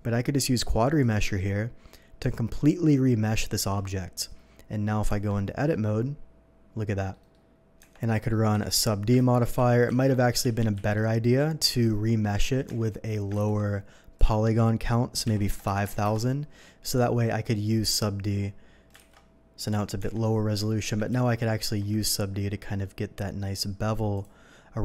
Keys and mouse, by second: 5.1 Tab, 5.6-10.7 drag, 7.8 Tab, 8.5 n, 9.1 ctrl+1, 9.5 ctrl+z, 9.7 ctrl+1, 9.9 ctrl+z, 10.7 ctrl+z, 11.5 ctrl+z, 11.6 n, 12.6 Tab, 13.1 click, 13.3 ctrl+z, 13.4-15.2 drag, 15.2 KP_5, 15.5 KP_0, 15.7 KP_0, 15.9 KP_0, 16.0 Return, 17.7-18.7 drag, 19.0 alt+v, 20.0 Tab, 20.6 Tab, 21.1 ctrl+1, 21.6 ctrl+2, 23.6-24.8 drag.